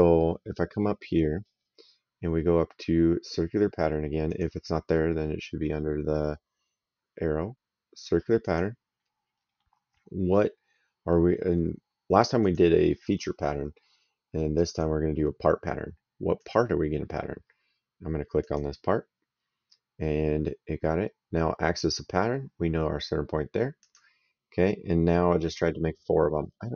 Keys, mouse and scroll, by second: 1.0 middle click, 4.2 click, 8.3 click, 12.3 click, 14.5 click, 16.3 click, 18.3 click, 21.7 click, 23.7 click.